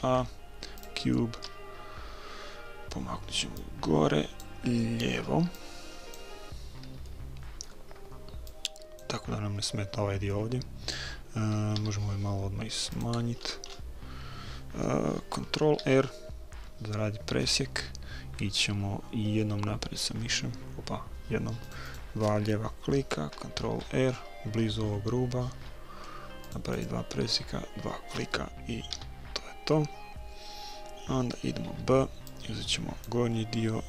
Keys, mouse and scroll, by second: 3.6-5.3 drag, 5.6-7.0 drag, 7.0 middle click, 7.2 click, 7.4-8.5 middle drag, 8.5-10.2 drag, 11.8 s, 13.4-16.0 middle drag, 15.8 ctrl+r, 23.7 ctrl+r, 28.9 a, 31.7 b.